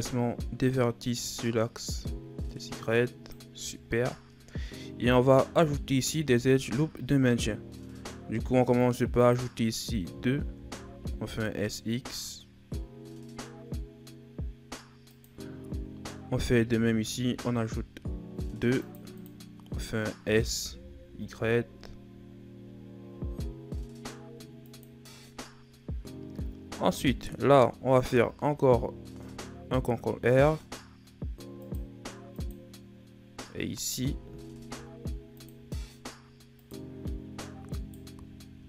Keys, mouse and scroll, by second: 0.5 click, 3.5 z, 5.8 ctrl+r, 16.2 ctrl+r, 27.8 ctrl+r, 33.9 ctrl+r, 37.6 alt+right click.